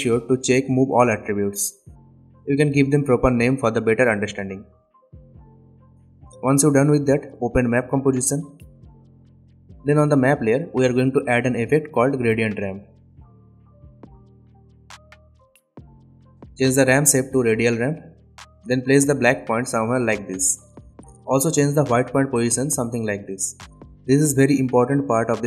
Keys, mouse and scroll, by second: 0.5 right click, 1.2 click, 2.7-3.9 typing, 4.9 click, 10.7 click, 11.4-13.0 typing, 14.9-20.7 drag, 18.8-20.2 shift+click, 21.0-22.1 shift+drag, 24.2-24.6 scroll down 2, 24.6-25.0 scroll up 2, 25.0 click.